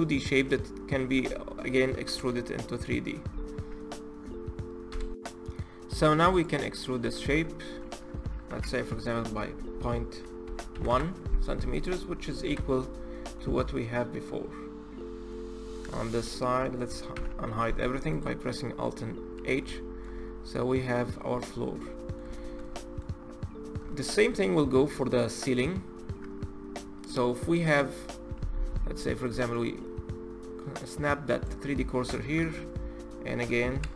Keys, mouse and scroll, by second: 1.9 3, 4.9 click, 6.0 click, 6.7 Tab, 8.2 e, 11.0 Tab, 11.5 click, 12.2 KP_Divide, 13.1-16.9 middle drag, 16.9 alt+h, 17.8 click, 18.1-18.7 middle drag, 18.7-19.5 scroll up 4, 19.5-20.1 shift+middle drag, 20.1-20.5 scroll up 4, 20.8-21.3 scroll down 5, 21.3-23.0 middle drag, 23.0-23.6 scroll down 1, 23.6-27.1 shift+middle drag, 28.6-29.3 scroll up 1, 29.3-32.1 shift+right drag, 32.1 shift+s.